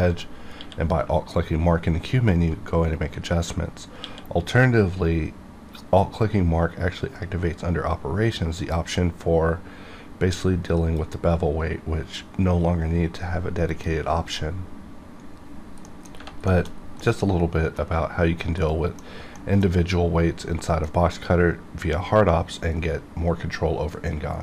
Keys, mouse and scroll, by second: 0.1 right click, 0.5 q, 5.3 q, 10.9 click, 13.6 click, 15.8 middle click, 16.4 shift+middle click, 16.6 shift+scroll down 1, 16.9 middle click, 17.7 scroll down 1, 18.6 middle click, 19.3 middle click.